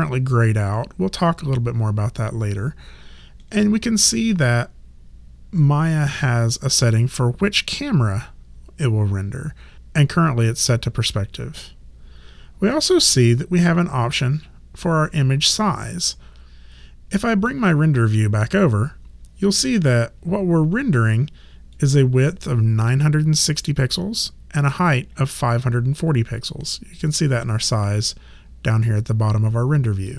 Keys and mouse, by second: 16.6 click, 21.7 click, 24.1 click, 30.0 click.